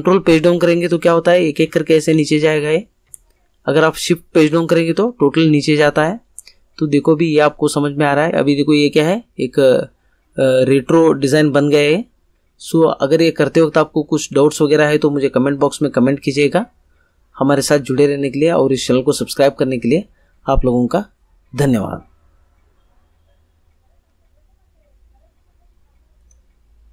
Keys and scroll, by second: 0.3 ctrl+Page_Down, 4.3 ctrl+Page_Up.